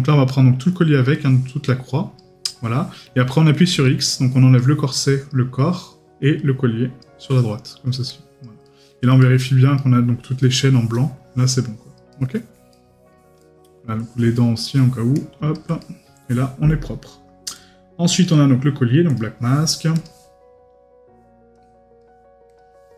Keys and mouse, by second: 8.6 right click, 12.1 right click, 15.8 right click, 18.2 right click.